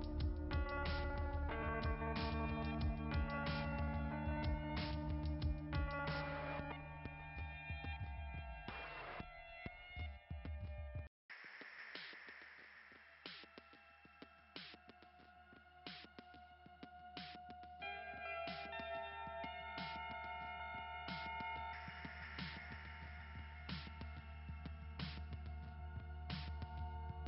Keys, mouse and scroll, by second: 0.5-4.0 typing, 5.6 click, 7.6-8.0 scroll down 2, 11.3-11.7 scroll up 2, 13.0-14.7 typing, 16.2 click, 16.6 click, 20.8-21.7 scroll up 2, 21.7-23.0 typing, 21.8 scroll up 1, 22.5 scroll up 1, 25.8 scroll down 1.